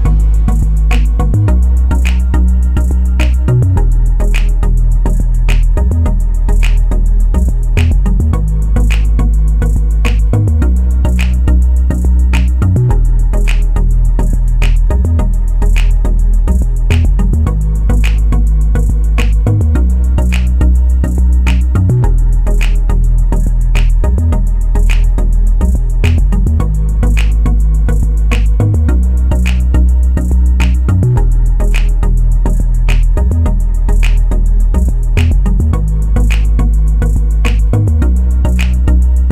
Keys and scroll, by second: 2.1 ctrl+z, 4.0 ctrl+z, 13.5 Escape, 18.0 ctrl+z.